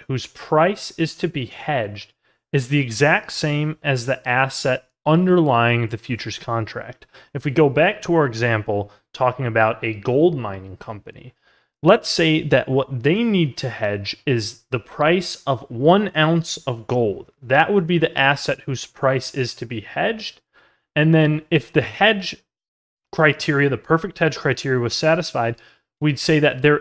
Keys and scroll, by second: 5.0 ctrl+z, 6.8 ctrl+z, 20.9 ctrl+z.